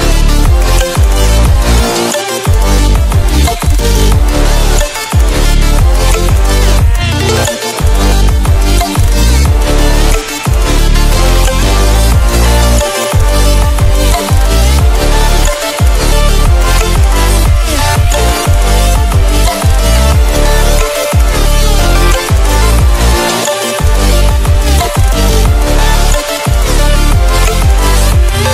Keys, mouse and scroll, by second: 1.5 scroll down 1, 1.9-6.9 drag, 9.5 scroll up 1, 10.5-11.7 scroll down 1, 11.7-13.3 drag, 13.3 scroll up 1, 15.3-18.2 drag, 18.2-18.7 scroll up 1, 18.7-20.5 drag, 20.5-21.1 scroll down 1, 21.6-22.3 scroll up 1, 23.1 Down, 23.5 Up, 24.1 Down, 24.4 Right, 25.4-25.8 scroll down 1, 27.4 click, 28.3 scroll up 1.